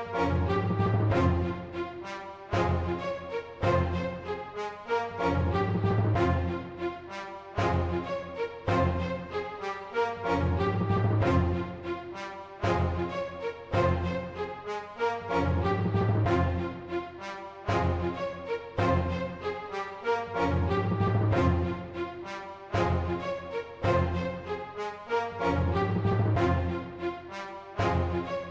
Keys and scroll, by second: 0.0-1.1 typing, 4.3-7.2 typing, 8.3-8.7 typing, 14.9-17.4 typing, 18.7-20.0 typing.